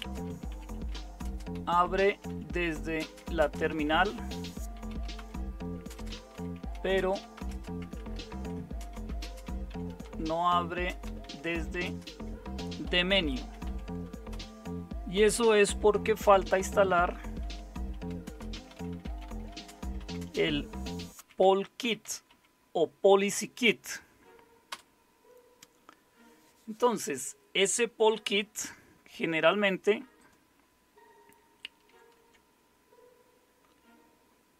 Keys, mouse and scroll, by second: 0.0-14.3 typing, 15.6-22.8 typing, 24.4-25.2 typing, 31.8 super+7.